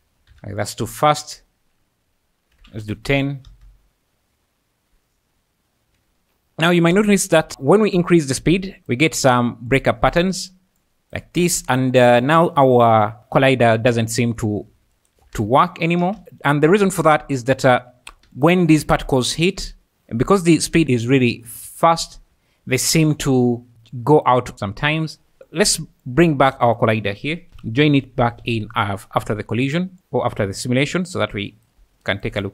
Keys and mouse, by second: 0.3 Escape, 0.6-2.9 drag, 3.5 space, 6.0 Escape, 6.9 space, 7.5 space, 7.9 space, 8.9 click, 13.0 click, 13.2-14.7 drag, 15.0 shift+click, 15.3 space, 16.0 space, 18.4 ctrl+shift+click, 19.8-24.6 typing, 21.8 click, 25.5 click, 26.1 click, 26.5 shift+a, 32.1 shift+click.